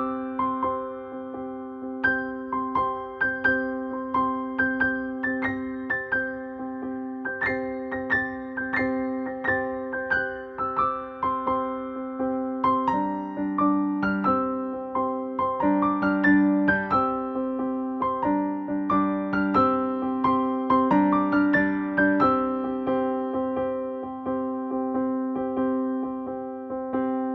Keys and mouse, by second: 0.3 typing, 1.4-2.9 shift+drag, 2.9-5.5 shift+drag, 5.5-8.2 shift+drag, 11.0 ctrl+g, 13.1 click, 14.2 ctrl+space, 14.3 ctrl+click, 14.6 ctrl+space, 15.1 ctrl+space, 15.6 ctrl+space, 18.4 click, 23.1-24.7 typing, 25.7-27.3 drag.